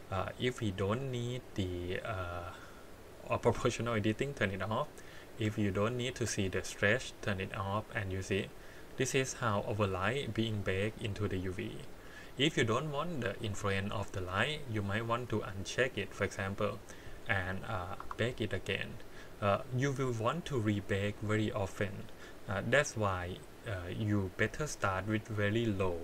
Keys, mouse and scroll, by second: 4.3 click, 5.3 middle click, 6.1-7.8 drag, 8.3-8.8 scroll up 4, 8.8 middle click, 10.7 scroll down 4, 11.3 middle click, 11.9-13.2 scroll up 3, 13.2 middle click, 15.3 click, 15.9 click, 18.0 Tab, 19.1 click, 19.5 click, 20.6 click.